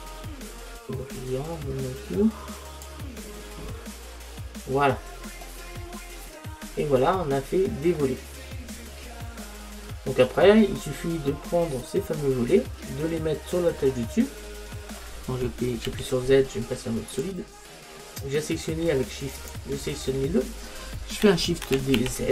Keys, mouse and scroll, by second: 0.1 click, 4.1-7.4 middle drag, 8.8-11.5 middle drag, 14.1-15.9 middle drag, 15.6 KP_Subtract, 16.0 z, 18.0-21.7 middle drag, 19.4-21.7 drag, 21.7 shift+d.